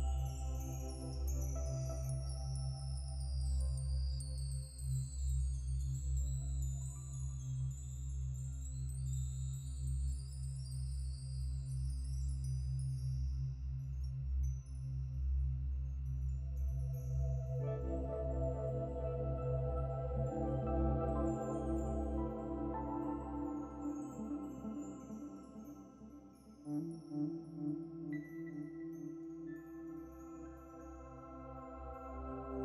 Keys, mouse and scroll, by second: 1.2 click, 2.2 scroll down 3, 2.6-3.1 scroll up 7, 3.2 Tab, 3.5 Tab, 3.9 click, 4.4 scroll down 4, 4.8 middle click, 5.4-5.9 scroll down 1, 6.1 e, 10.4 scroll up 3, 10.7-12.4 shift+middle drag, 12.4 click, 14.3 ctrl+r, 17.8-19.4 middle drag, 19.5-20.0 scroll up 5, 20.0-21.8 middle drag, 21.8 ctrl+b, 27.7 click, 28.6 click, 30.0 scroll down 3, 31.9-32.6 right drag.